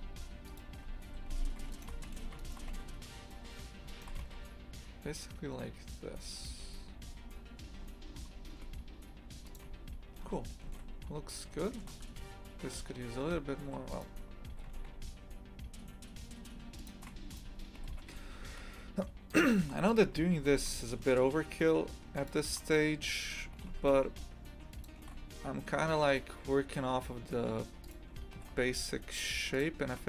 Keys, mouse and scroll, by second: 1.7 alt+shift+right click, 2.1 ctrl+x, 2.4 alt+shift+right click, 2.7 ctrl+x, 3.9 alt+shift+right click, 4.2 ctrl+x, 7.4-7.9 scroll down 10, 8.5 Tab, 9.5 click, 9.7 a, 10.2 scroll up 2, 11.0 scroll up 1, 11.6 shift+middle click, 12.0 Tab, 12.9-13.6 scroll up 3, 13.6 1, 13.9 right click, 14.5 g, 17.3 right click, 17.8 g, 19.9 right click, 20.4 g, 23.1 right click, 23.6 g, 27.8 right click, 28.4 g.